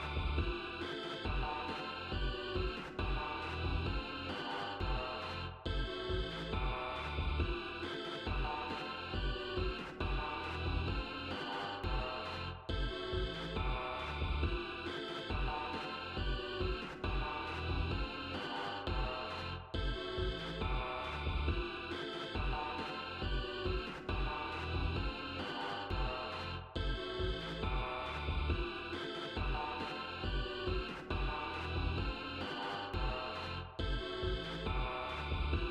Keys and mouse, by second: 0.0 click, 1.9 click, 2.6 click, 6.1-7.3 drag, 8.1 click, 9.3 click, 14.3 click, 21.6 ctrl+z, 23.8 click, 24.7 click, 25.5 click, 26.6 click, 28.6 5, 29.0 0, 33.4 click, 35.6 ctrl+z.